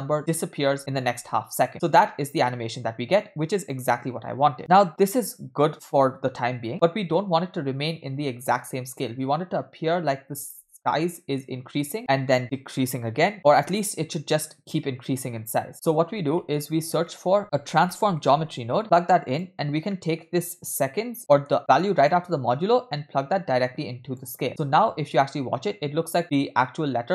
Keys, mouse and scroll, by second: 0.0-1.1 typing, 13.5 space, 15.7-16.4 scroll down 5, 15.7 space, 16.4 middle click, 16.7-17.1 scroll up 2, 17.1 middle click, 17.4 shift+a, 19.1 click, 19.6-19.9 scroll down 2, 19.9 middle click, 20.5-21.1 scroll up 2, 21.2 middle click, 22.1 click, 22.4-24.2 drag, 24.5 space.